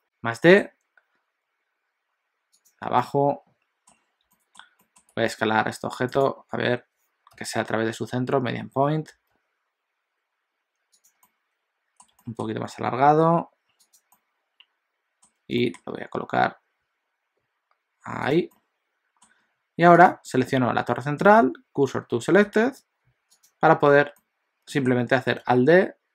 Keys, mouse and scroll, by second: 3.1 middle click, 4.0 scroll up 2, 4.3 shift+middle click, 5.2 s, 7.3 ., 11.3 middle click, 12.1 s, 14.2 middle click, 15.6 g, 18.6 middle click, 20.1 click, 21.4 shift+s, 23.4 click, 24.2 middle click, 25.5 alt+d.